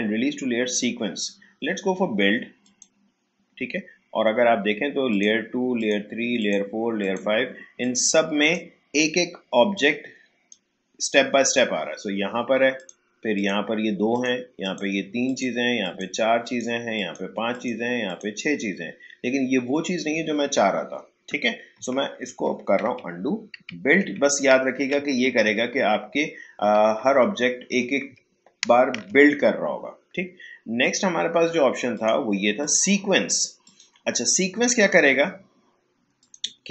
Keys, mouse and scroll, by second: 2.6 click, 5.1-12.7 drag, 12.7 click, 21.7 click, 22.3 ctrl+z, 30.8 click, 36.2 click.